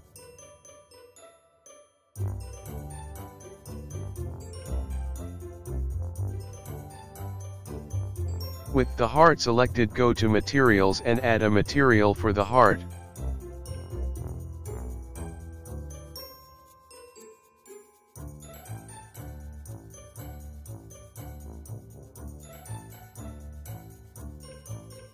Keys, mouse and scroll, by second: 0.0 g, 0.9 click, 1.1 g, 1.6 click, 2.0 space, 3.1 space, 3.4 click, 3.6 middle click, 4.0 KP_0, 4.3 scroll up 1, 4.3 scroll down 2, 4.8 click, 4.9 space, 6.1 space, 6.3 click, 6.7 click, 7.1 click, 7.5 click, 7.6 click, 8.2 click, 8.2 middle click, 10.1 click, 12.4 click, 13.6 click, 15.0 click, 16.2 click, 16.4 click, 16.5 click, 16.9 click, 17.4 KP_0, 17.5 space, 18.8 space, 19.4 click, 19.6 space, 20.9 space, 21.2 click, 21.5 click, 21.8 click, 21.9 click, 22.2 scroll up 2, 22.3 scroll down 1, 22.4-22.8 scroll down 1, 22.8 click, 23.2 click, 23.9 click.